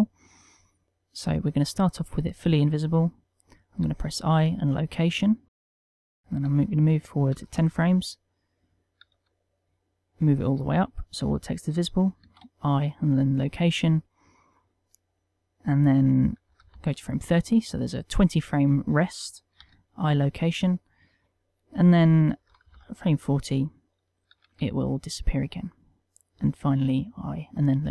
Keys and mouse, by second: 2.5 click, 4.2 i, 6.6 click, 9.5 g, 11.4 click, 12.7 i, 15.0 click, 20.0 i, 21.8 click, 24.8 g, 26.4 click, 27.1 i.